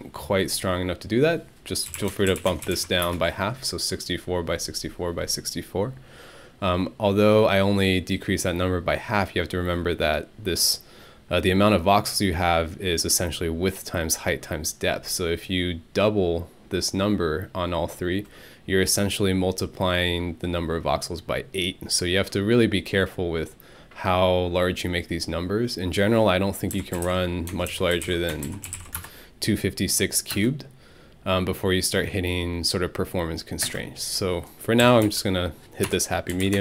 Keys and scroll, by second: 1.6-3.2 typing, 26.5-29.2 typing, 30.3 space, 33.6-36.6 typing, 36.5 Tab.